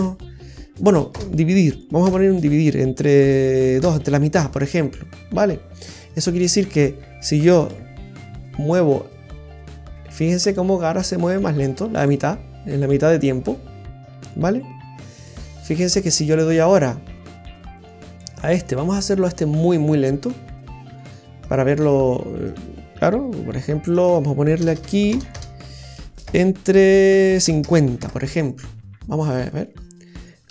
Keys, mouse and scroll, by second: 5.9 right click, 6.5 right click, 7.6 r, 16.4 right click, 17.7 right click, 18.5 right click, 20.8 right click, 24.7 BackSpace, 25.3 BackSpace, 29.4 right click, 30.4 r.